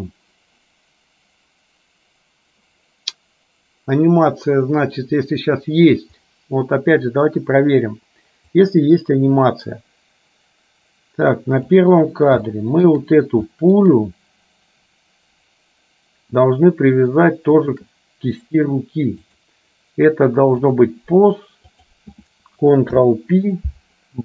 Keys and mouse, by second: 8.7-12.0 drag, 12.5 shift+middle click, 13.6 shift+middle click, 17.7 shift+click, 19.6-21.0 drag, 21.8 click, 23.1 ctrl+p.